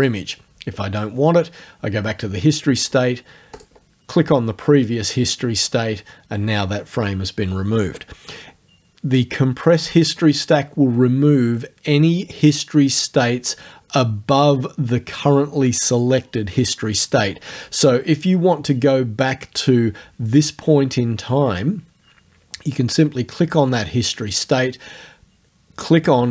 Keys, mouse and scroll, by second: 0.0 click, 3.6 click, 19.3 click.